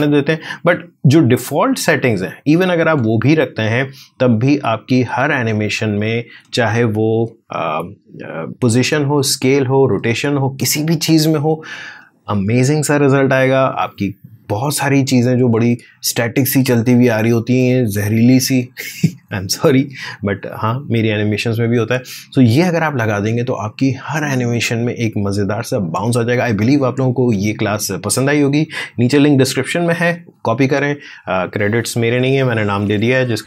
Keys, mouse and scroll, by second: 0.9-2.6 drag, 2.6 space.